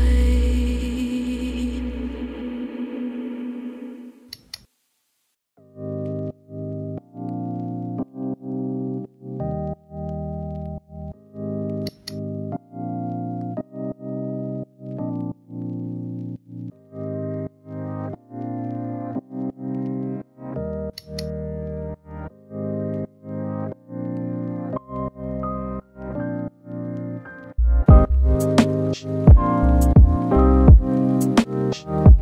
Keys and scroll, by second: 0.1 ctrl+z, 0.3 ctrl+z, 5.9 ctrl+z, 15.4 ctrl+z, 16.6 ctrl+z, 16.9 ctrl+z, 21.2 ctrl+z, 23.2 ctrl+z, 25.2 ctrl+z.